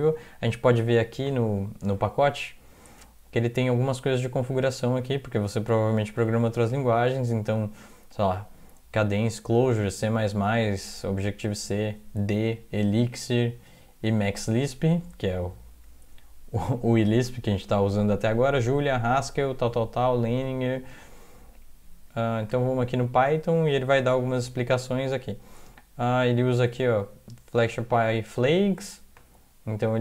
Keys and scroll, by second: 0.0 alt+Tab.